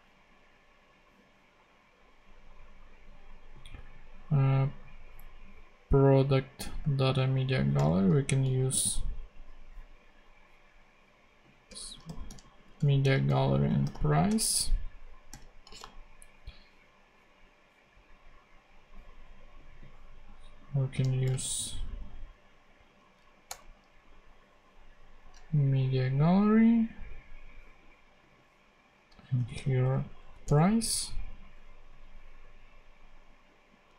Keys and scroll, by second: 11.6 Return, 11.6-14.3 typing, 13.2 Return, 20.9-21.8 typing, 23.4 Return, 29.1-30.1 typing, 30.4 Return.